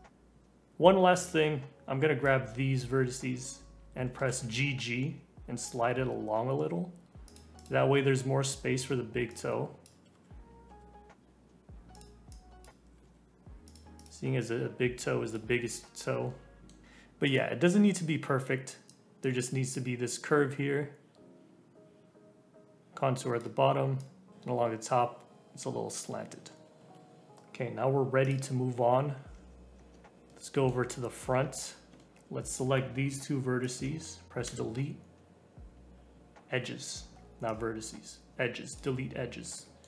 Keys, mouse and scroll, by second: 4.0 g, 7.5 click, 9.3 click, 9.9 g, 12.3 click, 12.8 g, 14.0 click, 14.5 scroll down 2, 15.0 scroll up 2, 15.2 click, 16.3 middle click, 17.2 click, 17.7-18.8 scroll down 1, 18.8-21.8 drag, 24.0 click, 26.5 ctrl+z, 26.8 ctrl+z, 27.3-28.2 scroll up 1, 28.2 click, 28.9 scroll up 3, 29.3 Tab, 29.7 Tab, 30.3 middle click, 31.2 alt+z, 31.4-31.9 scroll up 2, 31.9 shift+middle click, 32.1 alt+z, 32.4 click, 32.7 scroll up 2, 33.6 shift+click, 34.4 Delete, 39.3 scroll down 2, 39.6 middle click.